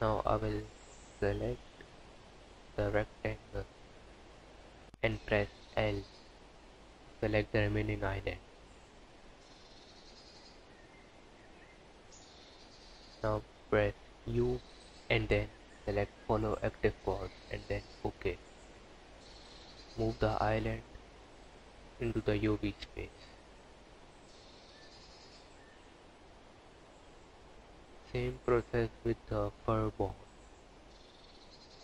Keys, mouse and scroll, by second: 1.6 click, 3.9 l, 9.6 scroll up 5, 11.4 scroll down 5, 16.5 u, 18.3 scroll down 3, 19.5 g, 21.6 scroll down 1, 22.3 Tab, 23.1 click, 24.3 Tab, 25.5 a, 27.2 u, 29.7 click, 30.9 scroll up 4, 31.6 KP_Decimal.